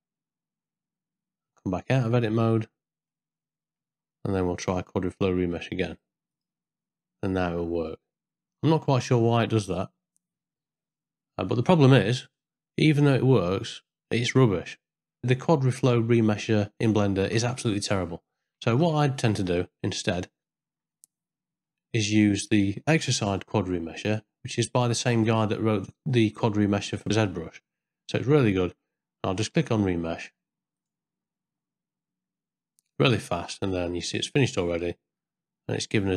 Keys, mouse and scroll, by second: 1.5 Tab, 2.1 ctrl+middle click, 3.1 middle click, 4.8-11.4 drag, 12.4 middle click, 13.1 shift+middle click, 18.6 ctrl+z, 19.6 middle click, 20.9 ctrl+middle click, 22.1 middle click, 23.4 n, 25.1 click, 30.9-32.8 drag, 34.1 z, 35.2 middle click.